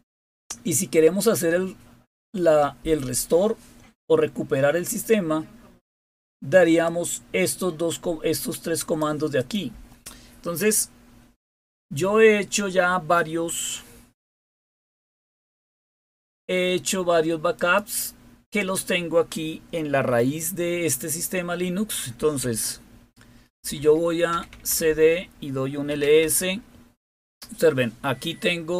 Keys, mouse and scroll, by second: 0.2-0.8 scroll down 1, 1.3-1.8 scroll down 2, 3.3-3.8 scroll down 2, 6.8-8.9 drag, 9.3 click, 17.5 click, 18.5 click, 18.8 click, 21.9-26.5 typing.